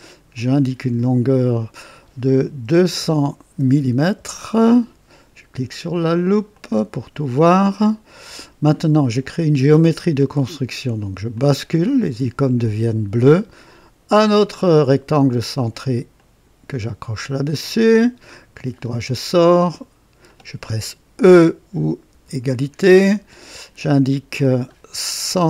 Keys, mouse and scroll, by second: 0.3 click, 1.5 click, 2.7 KP_2, 3.0 KP_0, 3.6 KP_0, 4.1 Return, 6.5 click, 7.2 typing, 7.6-8.5 right drag, 8.4 typing, 11.3 click, 14.1 click, 16.1 click, 17.7 click, 18.6 right click, 19.5 click, 20.3 click, 22.1 e, 23.3 click, 24.4 click, 25.3 KP_1.